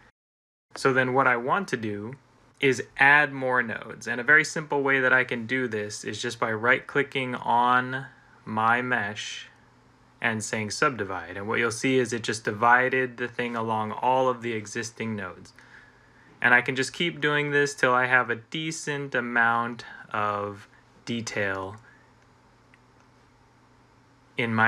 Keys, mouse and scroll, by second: 0.4 typing, 10.8 click, 11.9 click, 17.1 click, 17.8 click, 22.4 click.